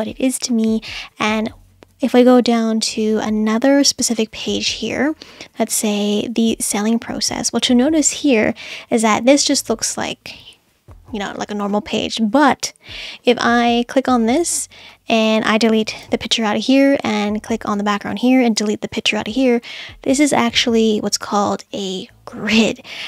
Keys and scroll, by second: 16.0 Delete, 18.6 BackSpace.